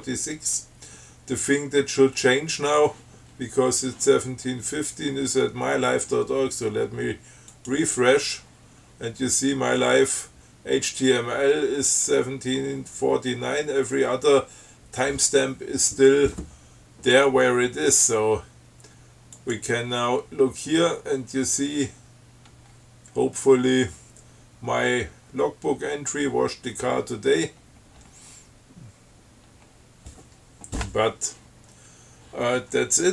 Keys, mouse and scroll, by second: 7.8 click, 19.6 click, 20.7-21.0 scroll down 3, 22.2 scroll up 3, 22.9-23.3 scroll down 3, 24.0 scroll down 2, 27.4-28.0 scroll down 3, 28.2-28.8 scroll up 5, 29.7 scroll up 2, 31.2 scroll down 2.